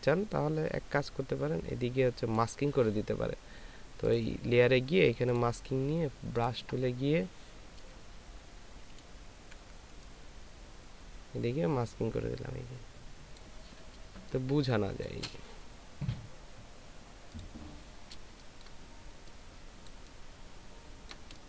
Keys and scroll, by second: 8.3 [, 8.9 [, 9.4 ], 9.6 ], 14.2 ctrl+space, 18.6 ctrl+space, 19.9 ctrl+space.